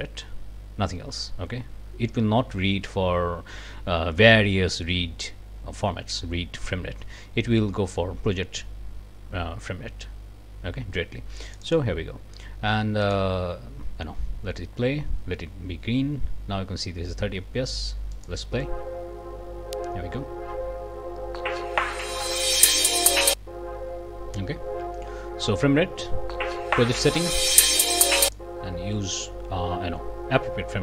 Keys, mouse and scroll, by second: 11.5 click, 13.0 click, 18.1 click, 28.1 click.